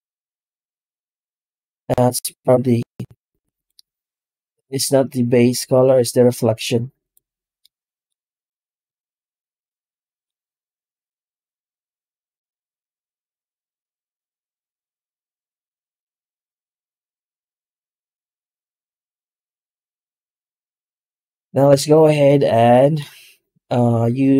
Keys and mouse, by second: 0.9-2.0 middle drag, 3.0 z, 6.3 z, 7.7 middle click, 9.6 middle click, 10.9-12.8 drag, 13.3-16.3 drag, 16.7 middle drag, 17.9-18.5 shift+middle drag, 19.1 z, 22.1-22.8 middle drag.